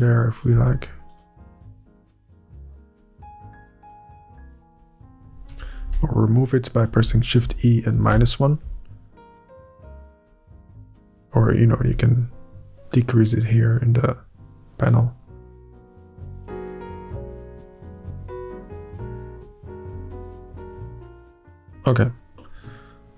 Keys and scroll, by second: 1.6 Up, 3.6 Up, 4.8 é, 5.4 ctrl+u, 5.8 Up, 6.7 shift+Up, 7.4 Up, 7.9 Up, 8.1 Return, 8.7 Up, 10.4 Up, 10.9 Up, 11.7 Up, 12.3 Up, 15.6 alt+a, 15.7 Up, 16.4 Up, 16.9 Up, 17.2 Return, 17.2 Up, 17.8 Up, 18.6 Up, 19.4 Up, 19.9 Up, 20.7 Up.